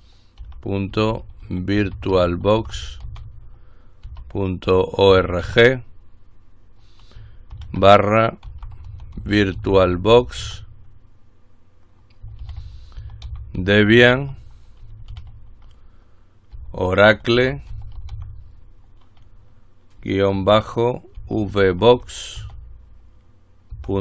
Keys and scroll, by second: 0.0-6.1 typing, 8.4-11.1 typing, 12.6-15.3 typing, 16.5-18.8 typing, 21.1-22.6 typing, 23.9-24.0 typing.